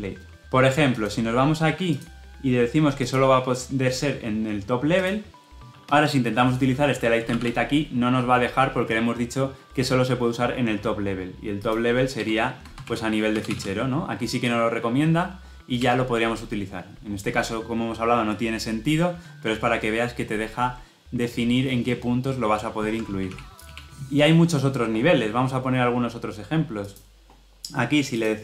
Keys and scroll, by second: 15.8 Return, 23.0 ctrl+z.